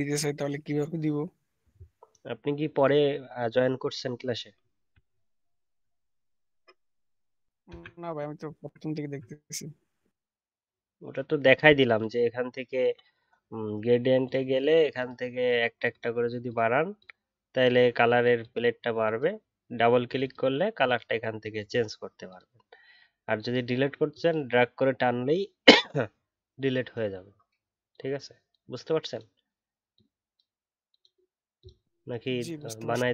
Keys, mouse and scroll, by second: 5.0 alt+scroll up 2, 8.8-12.0 alt+scroll up 3.